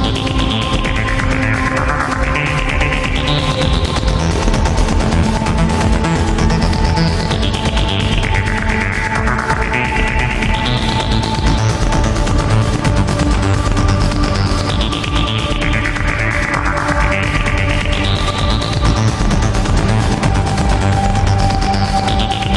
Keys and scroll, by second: 2.1 alt+space, 2.6 alt+space, 3.2 alt+space, 3.7 alt+space, 4.2 alt+space, 5.3 alt+space, 6.3 alt+space, 8.0 alt+space, 9.1 alt+space, 11.2 alt+space, 12.0 alt+space, 12.7 ctrl+alt+z, 13.1 alt+space, 15.0 alt+space, 20.3 alt+space, 21.9 alt+space.